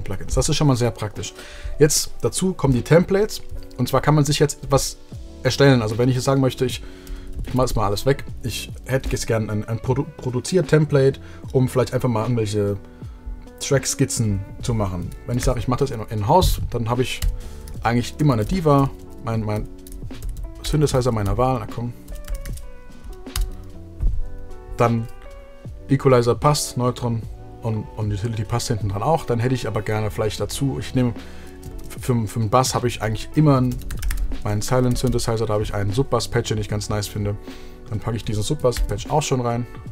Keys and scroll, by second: 7.3 BackSpace, 15.6 shift+super+t, 17.4-23.1 typing, 23.3 Return, 33.3 super+f, 33.5-34.9 typing, 35.1 Return, 38.9 shift+l.